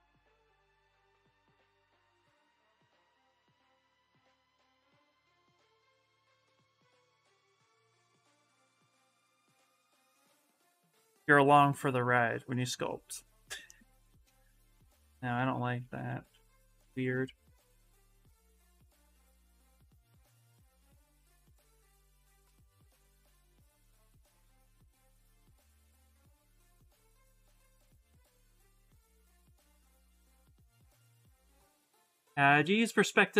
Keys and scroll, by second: 1.4 s, 8.7 s, 14.8 ctrl+z, 14.9 ctrl+z, 15.1 ctrl+z, 15.3 ctrl+z, 15.4 ctrl+z, 15.5 ctrl+z, 15.7 ctrl+z, 15.8 ctrl+z, 15.9 ctrl+z, 16.1 ctrl+z, 16.2 ctrl+z, 16.4 ctrl+z, 16.6 ctrl+z, 20.0 s, 27.0 s, 28.5 ctrl+z, 28.6 ctrl+z, 28.7 ctrl+z, 29.5 ctrl+z.